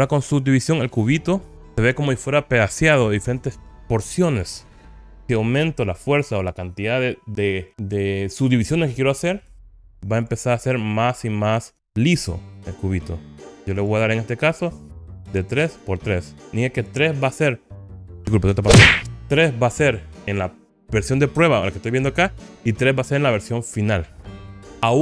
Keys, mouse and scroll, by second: 0.8-1.5 scroll up 4, 10.3-13.9 drag, 15.0 click, 15.8 click, 24.3 click.